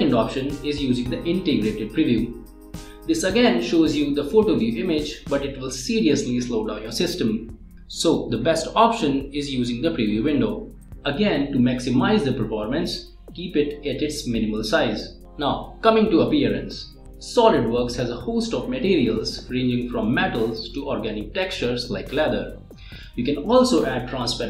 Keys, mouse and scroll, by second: 2.9 click, 5.7 middle click, 6.7 middle click, 10.4 click, 12.3-16.0 drag, 18.7 click, 20.9 click, 22.1 click, 23.8 scroll down 1, 24.3 scroll up 1.